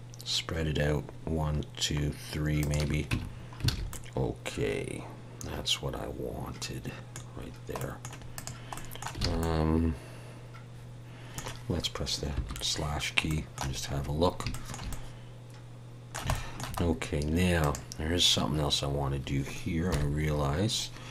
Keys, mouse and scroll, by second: 3.1 Tab, 3.3-3.7 scroll down 3, 3.7 alt+a, 3.9 middle click, 7.5 scroll down 1, 7.8 middle click, 8.3 click, 8.7 middle click, 9.2 alt+a, 9.4 middle click, 12.4 /, 12.9-13.8 scroll down 2, 12.9 /, 13.3 middle click, 13.8-14.4 scroll up 5, 14.5 shift+middle click, 14.9 middle click, 16.3 shift+middle click, 16.8-17.4 scroll up 1, 17.6 click, 20.0 KP_1.